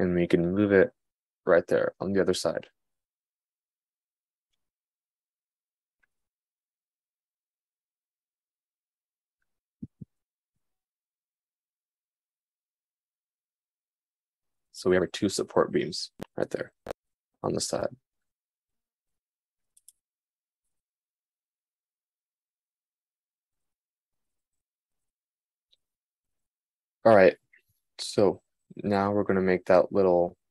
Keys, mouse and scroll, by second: 8.7 click, 9.8 g.